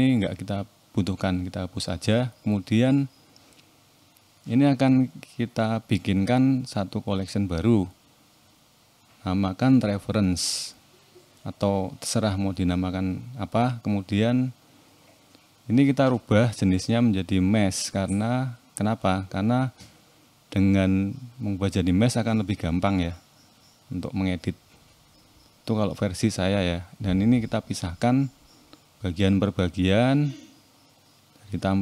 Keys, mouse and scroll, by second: 0.7 x, 3.0 click, 4.9 m, 13.0 click, 14.0 click, 15.0 click, 19.0 click, 19.5-19.9 scroll up 1, 19.9 click, 20.9 Tab, 21.6 click, 21.9 shift+middle click, 23.0 click, 24.4 click, 25.1 click, 27.2 p, 29.5 click, 30.9 p.